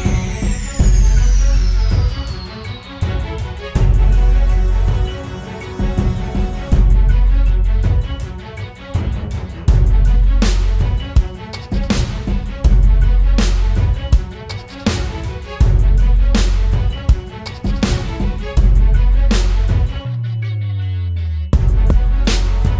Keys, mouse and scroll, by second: 1.5-2.3 typing, 4.3 double click, 6.7 ctrl+-, 8.5 alt+scroll up 1, 14.1 double click.